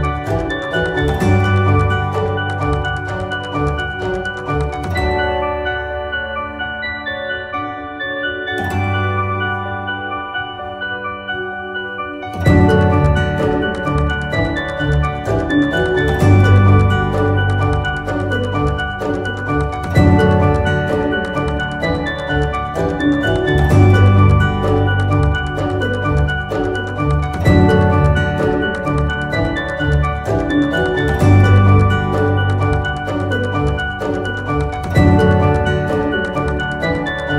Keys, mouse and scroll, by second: 1.0 click, 1.5 click, 2.2 click.